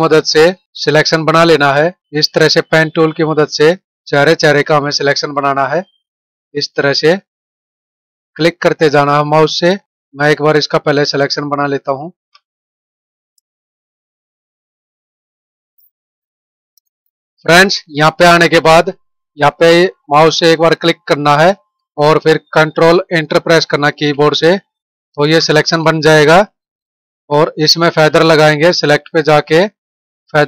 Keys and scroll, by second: 8.7 space, 16.3 space, 23.9 ctrl+Return, 24.6 ctrl+-.